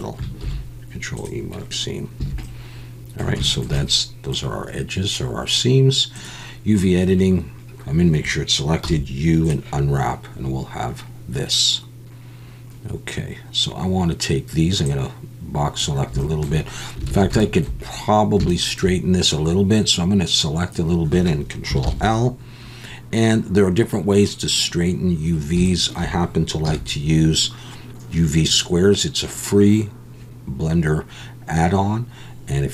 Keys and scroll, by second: 0.4 ctrl+e, 2.2 a.